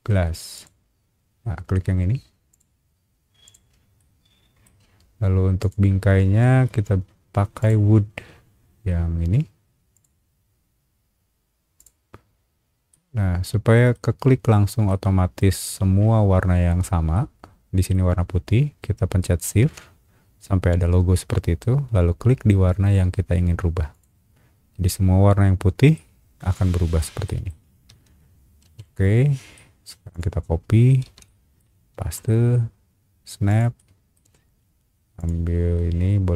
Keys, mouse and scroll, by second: 0.5 click, 2.5 click, 3.4 click, 4.0 middle click, 5.6 click, 6.5 scroll down 2, 7.6 click, 9.9 click, 11.8 click, 12.9-13.9 middle drag, 14.9 shift+middle click, 17.1 shift+middle click, 23.9 click, 25.9-27.0 middle drag, 27.2 middle click, 27.9 space, 28.3 scroll down 1, 28.6 Escape, 29.2 scroll down 1, 29.5 middle click, 30.1 click, 31.0 ctrl+c, 31.2 middle click, 31.9 ctrl+v, 33.5 click, 33.7 middle click, 35.2 click.